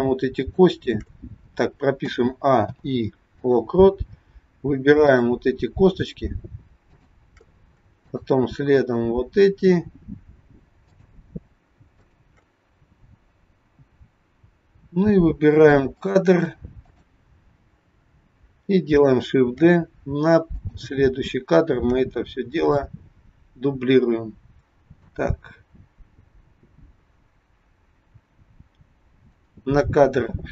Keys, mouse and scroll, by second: 0.3 shift+click, 2.0 a, 2.7 i, 5.0 click, 6.8 shift+click, 8.1 shift+click, 15.8 click, 16.8 click, 19.6 shift+d, 21.8 shift+d, 25.1 click.